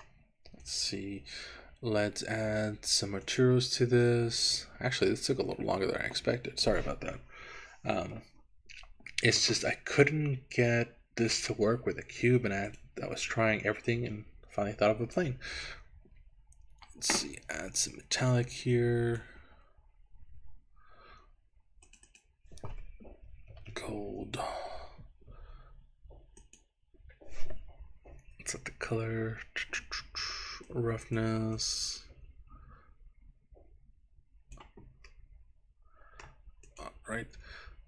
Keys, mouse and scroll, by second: 0.7 click, 3.3 click, 5.0-10.1 drag, 12.7 click, 18.0-19.3 drag, 20.0 scroll down 2, 20.9-21.9 scroll down 1, 21.9 scroll up 2, 22.1-24.3 drag, 26.9 click, 31.7-34.7 drag, 35.3-36.3 middle drag, 36.7 click.